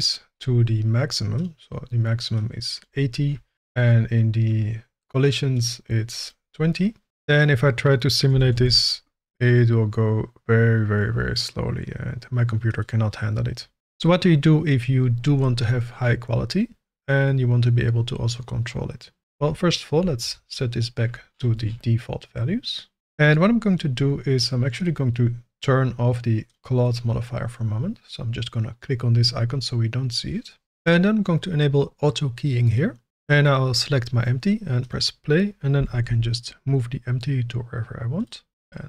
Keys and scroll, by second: 7.1 shift+z, 8.3 g, 8.5 shift+z, 20.2 BackSpace, 35.7 g, 36.0 shift+z.